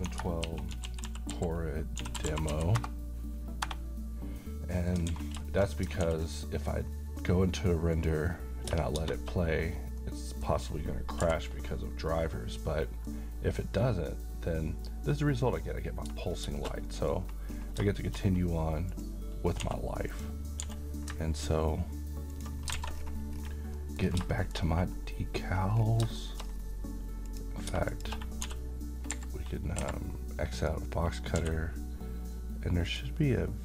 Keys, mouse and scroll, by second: 0.0-2.5 typing, 2.8 Return, 4.7 middle click, 5.1 a, 5.4 shift+middle click, 6.0 ctrl+s, 6.5 middle click, 6.8-8.0 scroll up 1, 8.0 click, 9.0 space, 10.0-10.7 middle click, 11.2 n, 11.8-13.3 middle drag, 16.5 shift+space, 16.8 middle click, 17.1-17.5 scroll up 1, 17.9 middle click, 18.2-18.9 scroll up 1, 18.9 click, 19.6 s, 20.2 click, 20.6 g, 22.3 ctrl+click, 22.7 alt+a, 23.1-23.8 scroll down 1, 23.8 middle click, 24.0 scroll down 1, 24.4 shift+middle click, 24.7-25.5 scroll up 1, 26.1 middle click, 26.3-27.3 scroll up 1, 27.3 click, 27.9 shift+click, 28.5 d, 29.2 Escape, 30.6 click, 31.4 d, 32.8 click.